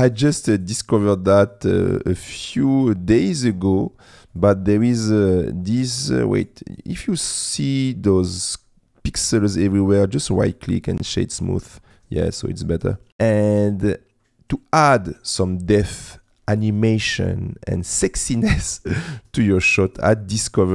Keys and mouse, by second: 5.8 right click, 7.3 click, 10.5 right click, 12.2 middle click.